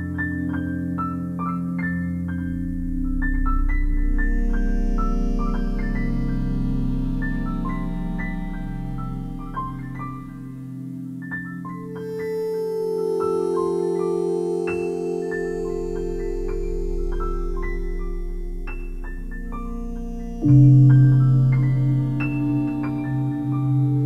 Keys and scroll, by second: 2.3 p, 17.5 e.